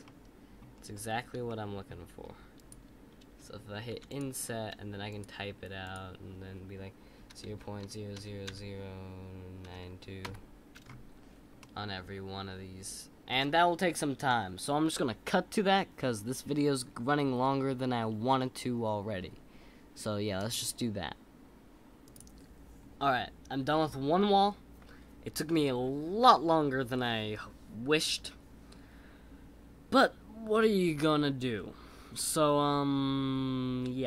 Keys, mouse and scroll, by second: 0.0 middle click, 0.7-1.4 scroll down 3, 1.4-2.5 shift+middle drag, 11.5-14.7 middle drag.